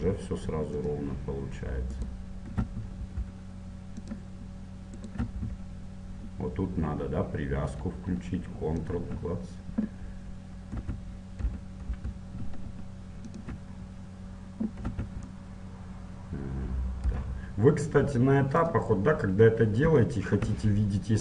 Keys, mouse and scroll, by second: 1.9-3.9 right drag, 2.6 e, 5.1-6.9 right drag, 5.3 e, 10.8 e, 13.9-15.9 middle drag, 14.9 e, 19.6-21.2 middle drag.